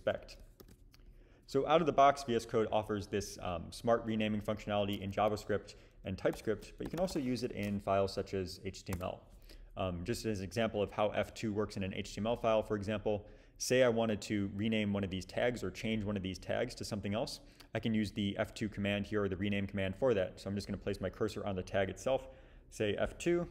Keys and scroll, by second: 0.8 super+b, 6.4 super+p, 6.6-7.6 typing, 8.4 Down, 8.6 Down, 9.0 Return, 23.1 F2.